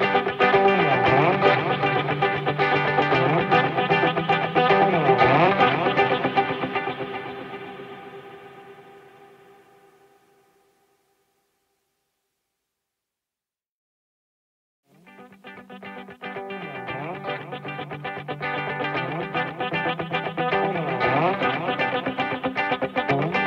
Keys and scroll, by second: 1.2 ctrl+-, 14.1 ctrl+=, 16.5 ctrl+-, 19.0 ctrl+=.